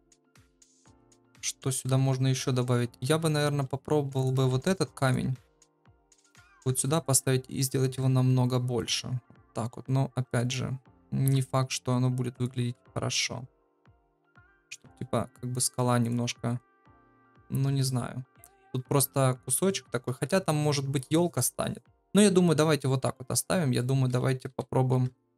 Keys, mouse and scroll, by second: 2.3 KP_7, 4.5 shift+d, 5.5 r, 6.5 s, 7.1 g, 7.9 KP_0, 9.7 g, 11.2 KP_7, 11.7 g, 12.7 KP_0, 13.6 g, 16.6-17.6 drag, 17.6 x, 23.8 click, 24.5-25.3 typing.